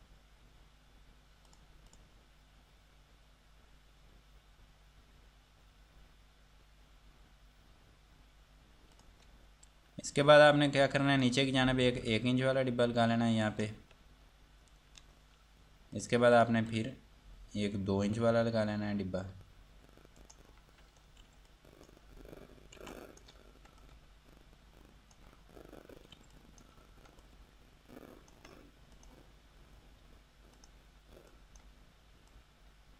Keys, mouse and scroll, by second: 1.7 click, 9.2 click, 10.7 F2, 11.1 click, 13.7 ctrl+right click, 16.2 click, 20.4 right click, 21.2 scroll up 1, 21.4 F2, 21.7 click, 22.3 scroll down 1, 23.0 F2, 23.1 click, 26.4 F2, 26.5 click, 29.2 click.